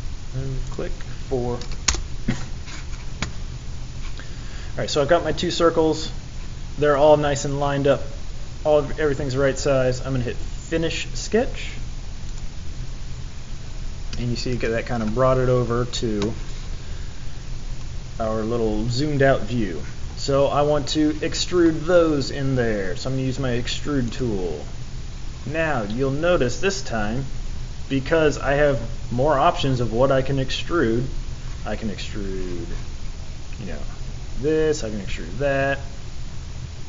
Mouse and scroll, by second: 24.0 click, 35.8 scroll down 1.